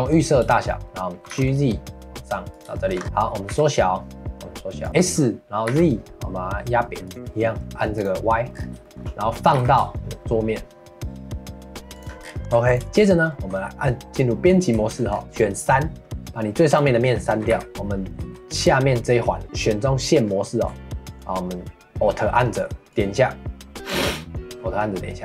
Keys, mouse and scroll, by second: 1.2 g, 2.7 shift+middle click, 3.5 s, 7.1 middle click, 7.9 click, 8.5 scroll up 5, 8.8 shift+middle click, 9.5 g, 12.2 scroll down 2, 12.4 ctrl+s, 12.9 shift+middle click, 13.5 Tab, 14.9 shift+middle click, 15.1 scroll up 2, 15.2 3, 16.7 click, 17.2 middle click, 17.5 x, 17.7 middle click, 18.2 2, 22.9-25.2 alt+drag.